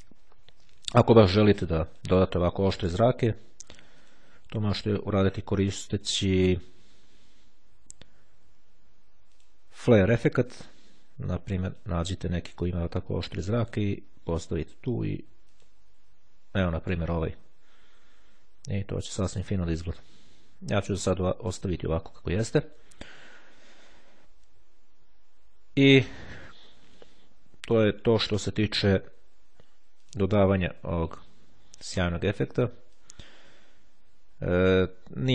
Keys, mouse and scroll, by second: 2.0 click, 4.1 click, 6.1 click, 9.3 click, 11.8 click, 13.7 click, 15.1 click, 17.5-18.1 scroll up 2, 18.1-18.4 scroll down 2, 18.7-19.0 ctrl+scroll up 2, 20.6-21.7 drag, 30.1 click, 33.1-35.3 drag.